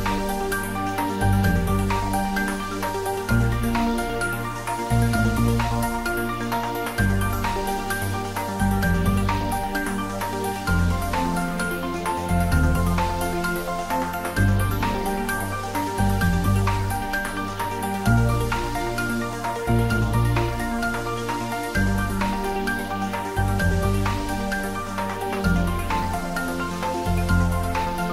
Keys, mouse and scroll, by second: 3.0 click, 5.0 click, 6.7 scroll down 1, 7.3 click, 8.2-8.5 scroll down 1, 8.5-9.6 scroll up 1, 10.4 click, 11.4 1, 12.9 typing, 13.5 Return, 14.7 click, 20.0 scroll down 1, 21.9 scroll up 1.